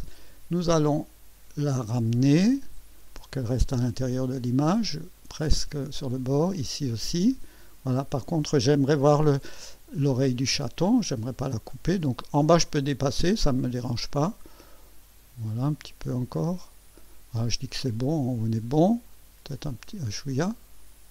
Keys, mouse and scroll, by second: 0.6-2.2 drag, 3.1-5.4 drag, 6.4-9.5 drag, 10.2-13.0 drag, 13.8-15.4 drag, 16.1 click, 19.1-21.1 drag.